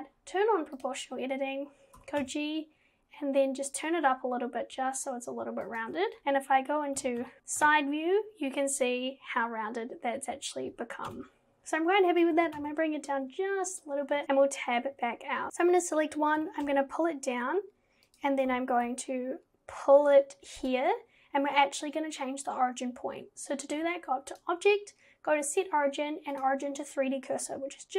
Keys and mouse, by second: 2.0 g, 6.2 KP_7, 7.0 KP_1, 7.2 KP_3, 7.4 KP_1, 11.1 KP_1, 12.4 g, 15.5 KP_1, 16.4 g, 18.5 g, 24.4-26.5 drag.